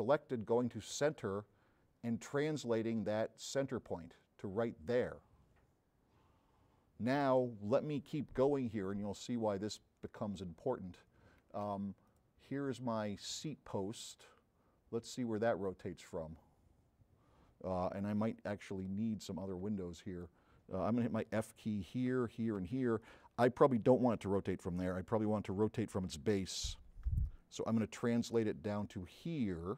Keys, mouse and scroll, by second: 0.4 middle click, 1.0 click, 1.2 middle click, 2.1 click, 3.0 middle click, 3.2 click, 9.4 scroll up 1, 15.4 click, 18.6 click, 21.7 f, 28.1-29.7 drag, 28.1 v.